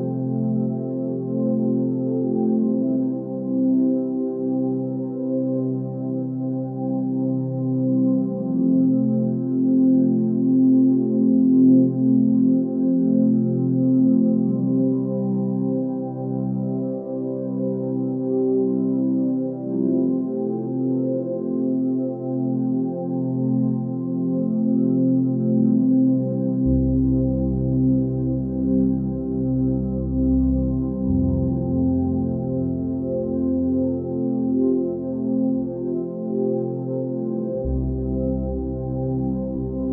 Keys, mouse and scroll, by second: 0.4 ctrl+z, 5.8 x, 8.8 x, 15.6 x, 17.3 x, 18.5 click, 19.3 ctrl+space, 21.5 x, 26.9 x, 28.0 x, 31.5 ctrl+space, 36.9 ctrl+space.